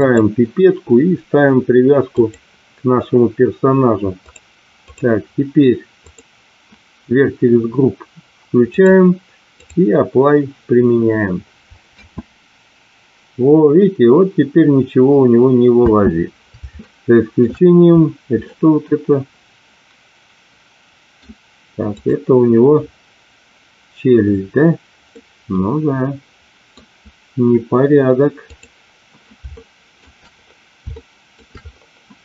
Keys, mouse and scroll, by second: 4.2 click, 8.8-9.9 drag, 12.1 space, 16.1 space, 16.8 shift+middle drag, 18.3-21.0 middle drag, 21.9 click, 25.0-26.7 middle drag, 28.7 click, 29.6 shift+middle click, 30.9 shift+middle drag.